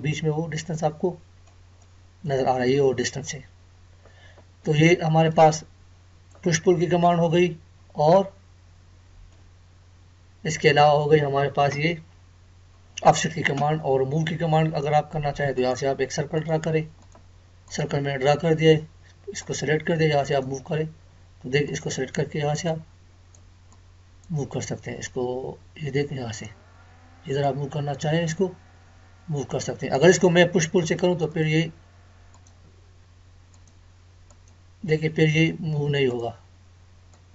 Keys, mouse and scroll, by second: 0.8-4.3 middle drag, 4.2 scroll down 1, 5.3-6.7 middle drag, 6.7-7.0 scroll up 1, 8.1-9.8 middle drag, 9.8-10.2 scroll up 1, 15.5-37.3 drag.